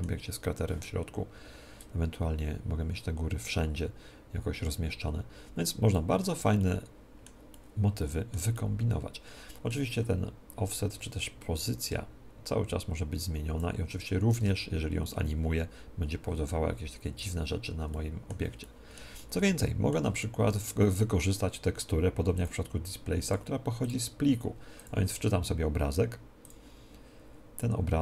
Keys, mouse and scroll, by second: 1.8-6.6 drag, 6.6-10.3 middle drag, 11.6-17.8 drag, 17.8-22.6 middle drag, 22.3-28.0 drag.